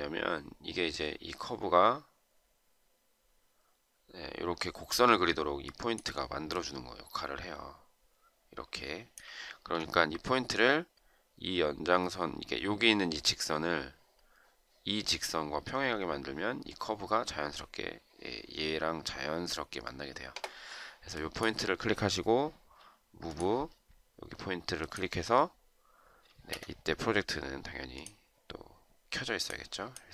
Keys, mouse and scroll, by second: 9.2 ctrl+z, 26.2 Escape.